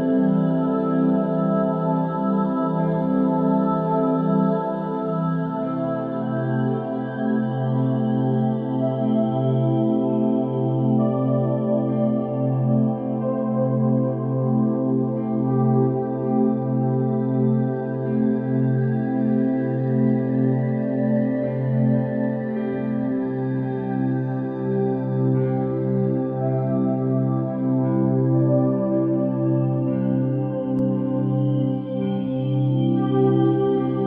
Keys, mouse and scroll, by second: 4.9 KP_3, 6.1 g, 8.5-9.9 middle drag, 11.2-16.0 drag, 16.3 ctrl+1, 18.6-20.9 drag, 20.9-22.3 right drag, 22.3 click, 22.9-23.3 middle drag, 23.3-23.8 scroll down 4, 23.8-26.5 middle drag, 26.5 KP_1, 26.7 shift+a, 29.5-29.8 middle drag, 29.8-30.2 scroll down 4, 30.2 g.